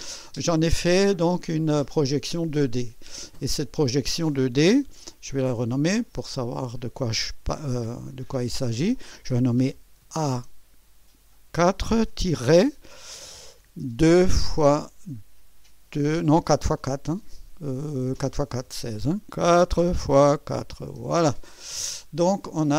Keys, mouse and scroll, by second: 3.6 click, 5.1 F2, 6.0 click, 10.1 shift+a, 11.6 4, 12.4 -, 14.0 2, 14.6 x, 19.5 4, 20.1 x, 20.5 KP_4, 21.0 Return.